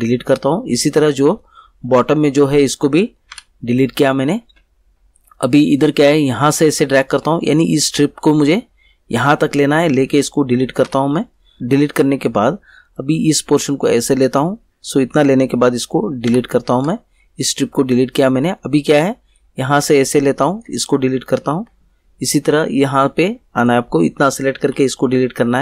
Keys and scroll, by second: 3.3 Delete, 10.8 Delete, 16.3 Delete, 21.5 Delete, 24.6 Delete.